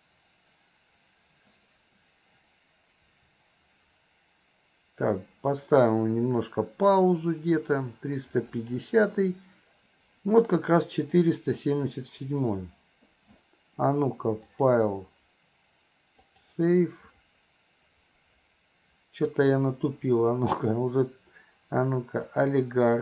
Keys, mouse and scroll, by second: 14.5-17.5 drag, 19.4-23.0 drag.